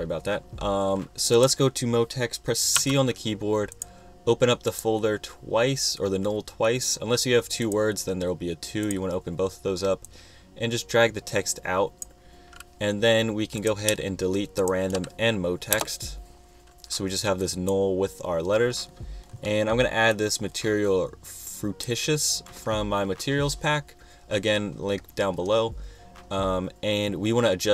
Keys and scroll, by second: 2.9 c, 15.9 shift+BackSpace.